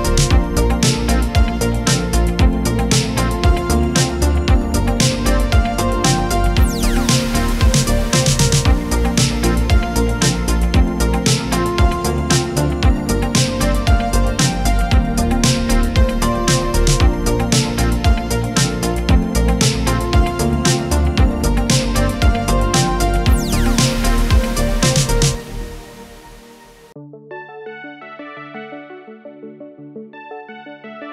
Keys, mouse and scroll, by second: 0.0 ctrl+d, 2.3-8.2 shift+drag, 16.7 ctrl+d, 19.4 p, 20.6-24.0 drag.